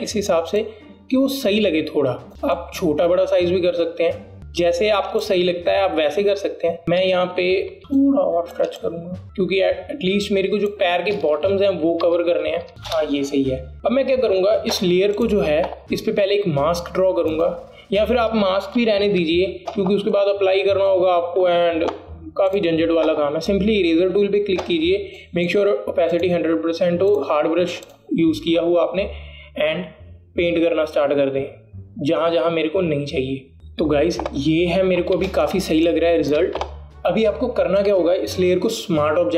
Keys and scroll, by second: 7.8 Right, 12.7 Down, 13.0 Up, 13.7 Return, 20.5 ctrl+alt+z, 36.4 alt+space.